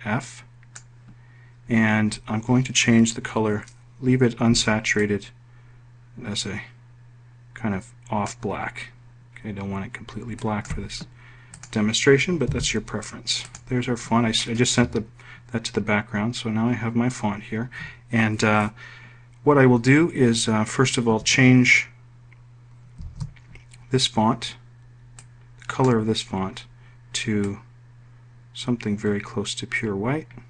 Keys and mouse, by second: 0.0-1.0 drag, 12.5 click, 13.4 Page_Down, 14.4 click, 24.0 ctrl+shift+f, 26.2 click, 28.4-30.4 drag.